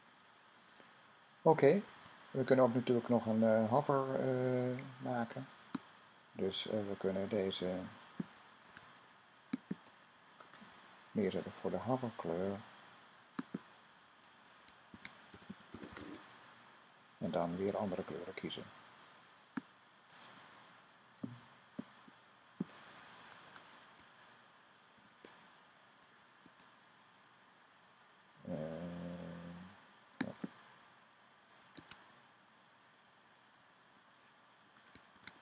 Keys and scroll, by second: 1.7 super+s, 8.5 super+c, 11.1 v, 14.5-16.4 typing, 24.8 shift+;, 34.9 :.